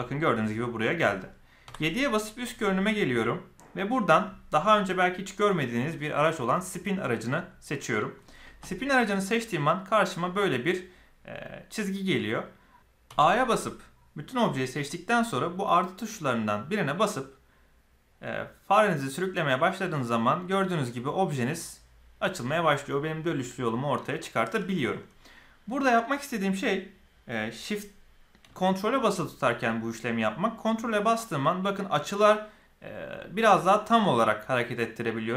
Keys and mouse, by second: 1.6 KP_7, 7.3 click, 13.0 a, 16.5-35.3 drag.